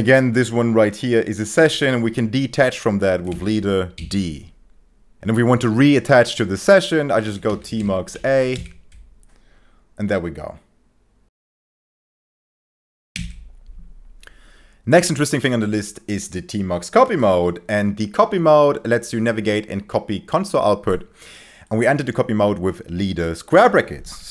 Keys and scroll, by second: 3.3 b, 3.9 d, 6.9-8.6 typing, 8.6 Return.